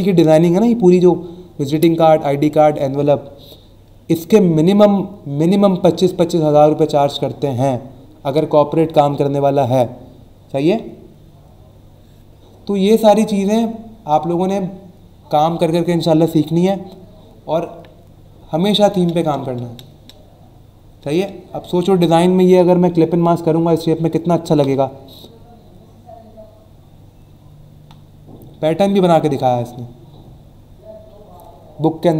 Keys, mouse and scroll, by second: 13.1 scroll down 1, 13.7-15.1 scroll down 4, 15.6-17.1 scroll down 4, 17.5 scroll down 1, 18.6-19.1 scroll down 2, 20.0 scroll down 1, 25.3 scroll down 1, 26.6 scroll up 1, 27.1-28.0 scroll down 3, 29.0 scroll down 1, 29.5 scroll down 1, 30.2 scroll down 1.